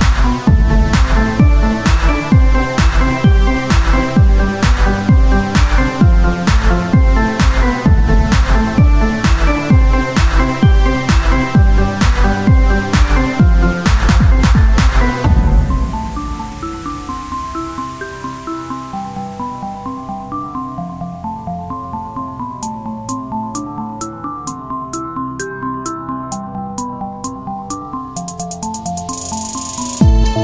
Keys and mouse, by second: 2.2 click, 2.3-4.4 right drag, 2.9 c, 4.5-6.2 drag, 5.0 o, 5.0 i, 6.2 o, 7.3 o, 7.8 s, 9.7-11.3 drag, 12.9 c, 13.9-17.6 drag, 15.5 c, 17.6-19.1 right drag, 17.7 c, 19.9 click, 20.3 c, 21.9 click, 23.0 c, 24.5 click, 24.9 Tab, 25.4 Tab, 26.4 click, 26.9 c, 28.8-30.4 drag, 28.9 Tab, 29.4 z.